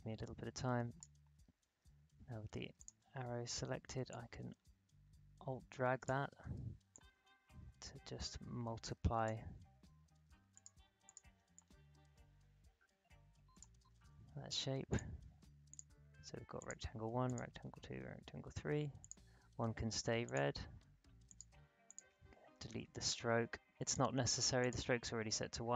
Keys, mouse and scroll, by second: 4.1-6.9 alt+drag, 8.0-14.9 alt+drag.